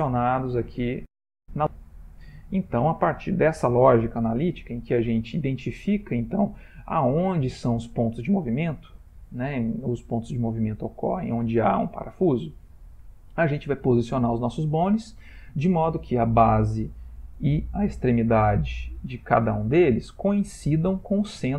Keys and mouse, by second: 0.1 middle click, 0.2 middle click, 0.6 middle click, 2.1 click, 7.5 shift+middle click, 12.5 shift+middle click, 13.5 ctrl+middle click.